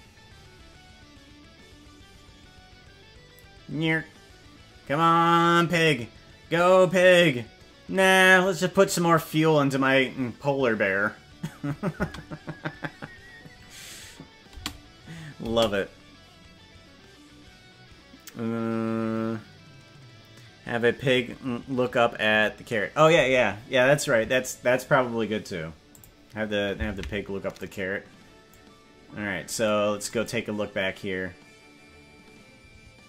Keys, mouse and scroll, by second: 12.1 space, 14.7 space, 15.5 space, 25.9 click, 26.9 ctrl+Tab, 27.7 right click, 28.5-29.6 drag, 30.2-33.0 drag.